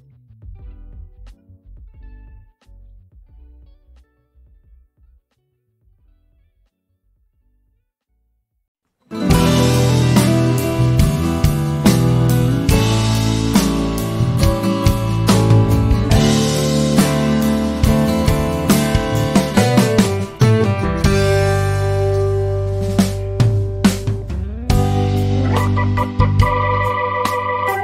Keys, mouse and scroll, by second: 0.2 F1, 0.4 click, 0.8 ctrl+scroll up 1, 1.6 click, 2.0 ctrl+d, 2.1-2.7 click, 4.0 ], 4.8 F2, 6.0-7.2 drag, 7.6 ctrl+scroll down 1, 7.8 z, 8.0 click, 8.4 F1, 9.4-11.2 drag, 14.0 F1, 14.6 click, 15.1 ctrl+d, 15.5-15.8 drag, 16.1 ], 16.4 ], 18.0-19.6 drag, 19.7 F2, 20.2-21.4 drag, 22.7-23.3 click.